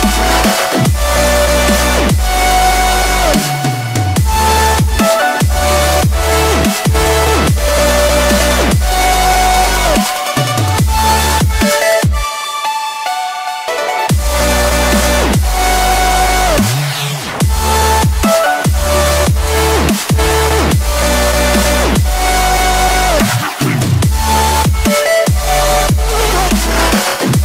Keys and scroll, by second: 6.0 Return.